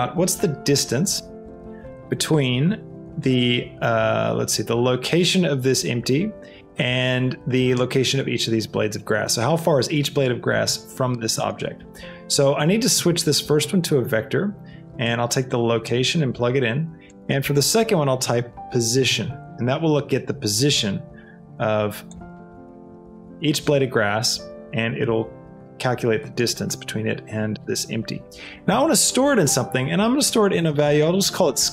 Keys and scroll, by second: 18.2 o, 18.6 i, 19.0 i, 19.3 Return, 30.3 s, 30.7 a, 31.4 e.